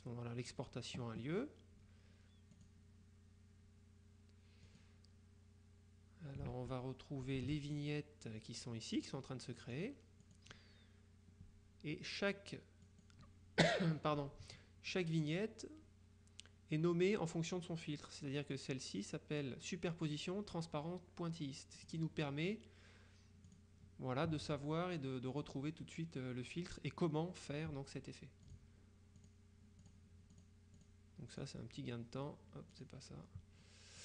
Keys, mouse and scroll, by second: 2.6 click, 4.7 click, 6.6 alt+Tab, 7.6 Tab, 9.0 click, 12.9 click, 21.9 click, 23.6 click, 28.6 click, 29.3 click, 30.9 click, 32.8 click.